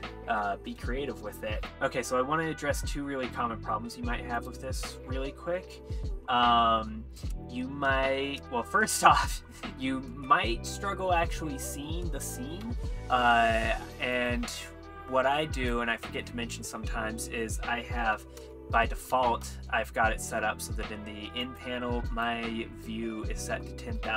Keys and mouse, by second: 5.5-6.1 middle drag, 6.9-8.1 middle drag, 8.5-14.3 shift+middle drag, 14.3 n, 15.6-16.8 drag, 19.3 n, 20.8 n, 22.1-24.1 drag.